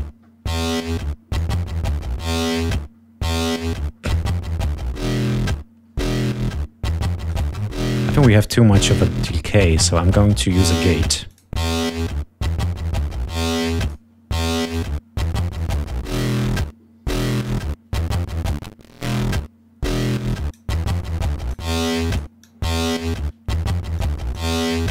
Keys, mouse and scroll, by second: 0.0-1.5 drag, 2.5 click, 7.3 right click, 11.3 click, 13.5 click, 14.5 click, 15.5 click, 17.0 click, 18.4-20.7 drag, 20.9 click, 21.8 click, 22.4 click, 23.9 click.